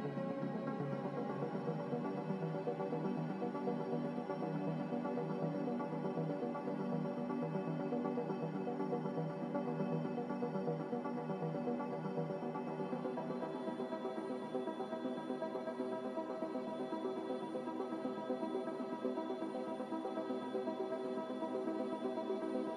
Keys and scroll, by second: 0.4 z, 11.7 F9, 13.9 n, 21.4-21.8 typing.